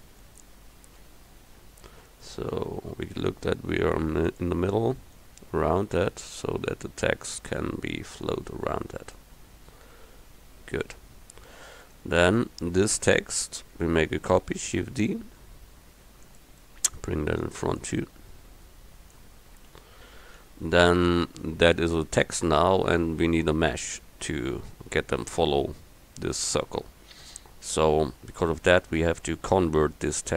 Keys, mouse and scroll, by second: 1.1 KP_1, 3.2 s, 5.3 click, 8.4 click, 10.0 s, 14.8 shift+d, 19.8 KP_1.